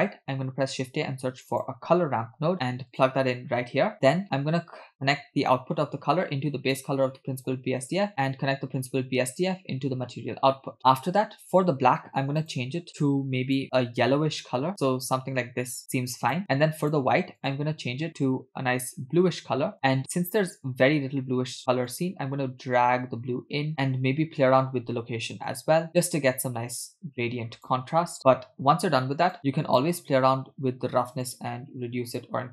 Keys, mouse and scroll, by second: 0.7 shift+a, 5.5 click, 7.2 middle click, 7.9 click, 8.3-9.7 drag, 10.6 middle click, 12.4 scroll up 3, 12.5 click, 16.8-17.1 drag, 17.5 click, 21.9-23.7 drag, 23.7 middle click, 25.5-27.8 shift+drag, 28.2 middle click, 28.2-28.5 scroll down 2, 29.4 click, 31.2-32.5 drag.